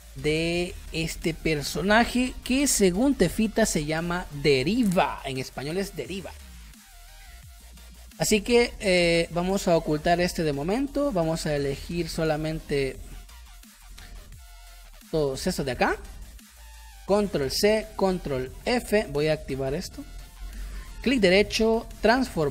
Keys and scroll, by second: 15.5 ctrl+z, 16.1 space, 17.5 ctrl+c, 18.6 ctrl+f.